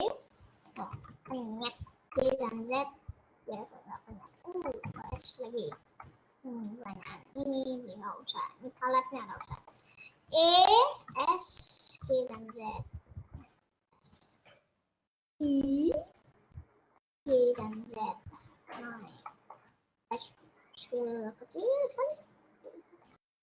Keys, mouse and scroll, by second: 1.2 ctrl+z, 2.3 g, 5.2-8.4 middle drag, 9.3-10.4 middle drag, 10.4 e, 11.2 s, 12.0 g, 15.3 s, 17.2 g, 19.2 middle click, 20.0 s.